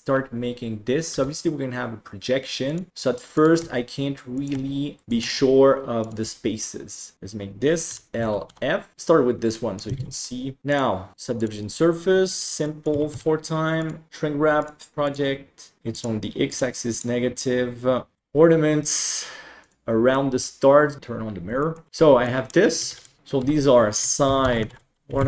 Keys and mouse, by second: 1.1 g, 2.9-6.1 typing, 7.8 l, 8.4 f, 9.5 middle click, 10.6 Tab, 11.1 click, 12.2 click, 12.6 click, 13.7 click, 14.9 click, 15.9 click, 16.4 click, 16.9 click, 18.2 g, 20.3 middle click, 21.6 shift+middle drag, 21.9 Tab, 22.2 middle drag, 23.2 Delete, 23.4 F2.